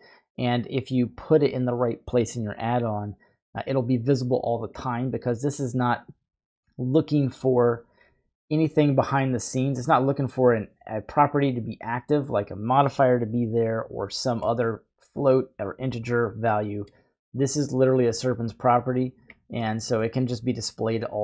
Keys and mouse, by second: 4.1-4.7 drag, 6.8 click, 9.9 click, 11.1 click, 11.6 click, 14.5 middle click, 16.5 middle click, 18.1-19.3 drag, 19.3 typing, 19.8 middle click, 21.0 click.